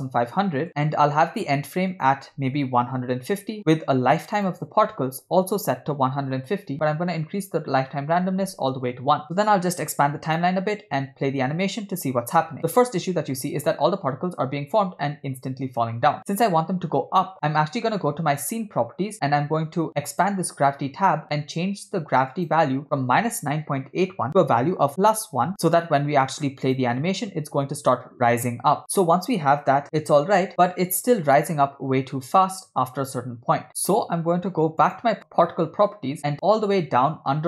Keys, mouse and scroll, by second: 0.1 0, 2.0-3.6 drag, 4.4-6.5 drag, 7.4-8.8 drag, 9.2-10.5 drag, 11.1 space, 14.8 space, 18.4 click, 20.1 click, 22.4-25.5 drag, 26.7 click, 27.0 space, 29.8 space, 30.5 space, 33.5 space, 34.9 click, 36.0-37.0 scroll down 5.